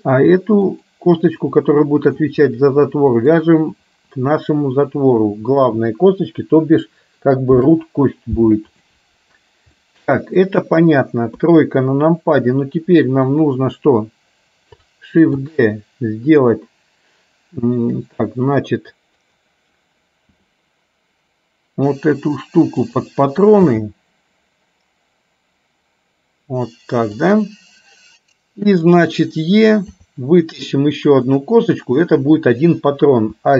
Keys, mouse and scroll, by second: 1.6 middle click, 3.2 shift+click, 7.6 ctrl+p, 10.0 middle click, 11.5 KP_3, 13.5 click, 15.5 shift+d, 20.5 r, 23.8 g, 29.0 click, 30.1 e, 32.1 click.